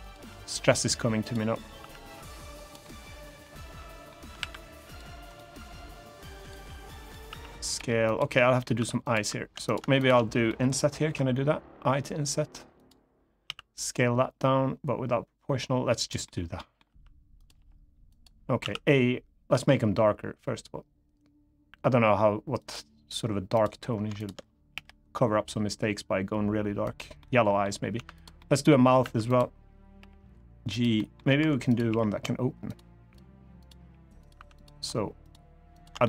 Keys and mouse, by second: 0.9 click, 1.5 s, 2.4 click, 2.5 middle click, 3.5 middle click, 4.1 ctrl+r, 5.0 right click, 5.3 s, 6.1 click, 6.3 g, 6.7 click, 7.0 s, 7.4 click, 7.5 g, 7.8 click, 8.1 middle click, 8.5 3, 8.8 click, 9.4 click, 9.7 shift+click, 10.2 middle click, 10.8 i, 12.5 click, 13.2 s, 15.7 click, 16.0 middle click, 16.6 r, 17.1 click, 17.3 g, 17.8 click, 18.3 a, 19.2 g, 22.3 click, 23.9 shift+click, 26.6 click, 26.6 g, 26.9 middle click, 27.9 click, 27.9 3, 28.1 middle click, 28.7 2, 29.0 click, 29.7 g, 30.4 click, 30.7 middle click, 31.1 1, 31.6 g, 32.4 click, 33.5 g, 33.9 click, 34.1 3, 34.3 click, 35.5 shift+click, 35.7 middle click.